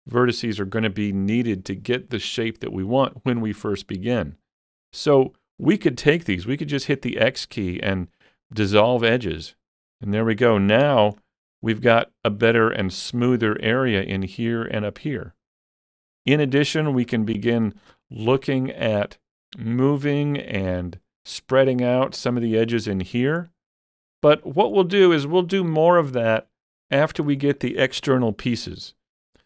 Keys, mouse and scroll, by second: 6.8-8.9 scroll up 1, 6.8 x, 9.2 click, 10.9 Tab, 11.2-11.5 scroll down 3, 11.5 middle click, 12.9 middle click, 12.9-16.3 middle drag, 16.3 shift+middle click, 16.7 shift+middle click, 17.1 Tab, 17.3 scroll up 3, 17.6 shift+middle click, 18.4-23.5 shift+middle drag, 23.1-23.5 scroll down 2, 23.5 middle click, 24.4-26.6 shift+middle drag, 26.9 shift+middle click, 27.4 shift+middle click, 28.0 Tab, 28.3 shift+middle click.